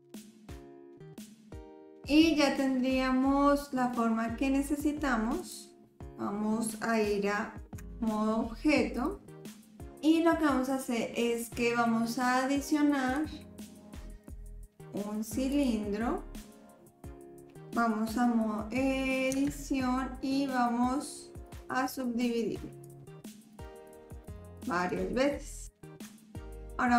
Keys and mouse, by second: 1.0 click, 7.8 Tab, 8.9 click, 13.1-15.6 drag, 16.4-17.6 middle drag, 19.3 Tab, 21.5-22.9 drag, 23.6 click, 24.3 click, 24.9 click, 26.0 Tab.